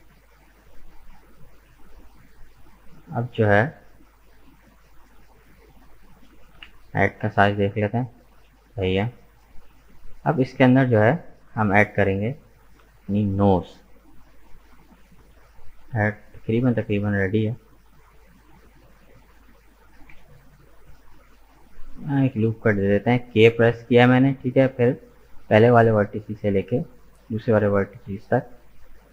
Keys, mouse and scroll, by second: 3.5 scroll down 1, 3.8-4.9 middle drag, 4.9 Tab, 5.0 right click, 5.3-6.6 middle drag, 6.6 KP_1, 10.1 right click, 13.1 Tab, 13.5-14.3 scroll up 2, 14.3 shift+middle click, 15.0-15.5 scroll up 1, 15.5-18.4 shift+middle drag, 18.4-18.7 scroll down 1, 18.7-20.1 middle drag, 20.1 k, 27.0-29.1 middle drag.